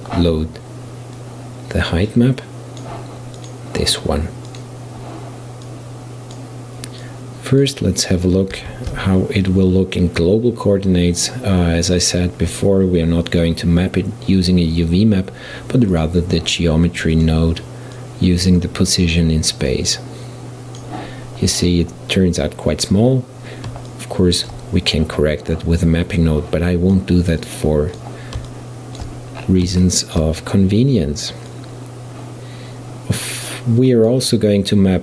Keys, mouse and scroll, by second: 5.7-9.1 drag, 9.1 shift+a, 18.0-19.0 drag, 19.8-22.8 drag, 22.8-23.9 scroll up 1, 23.9-26.2 middle drag, 26.2-28.5 drag, 28.5-29.5 shift+middle drag, 29.5-29.9 scroll down 5, 29.9-31.5 shift+middle drag, 31.5-35.0 drag.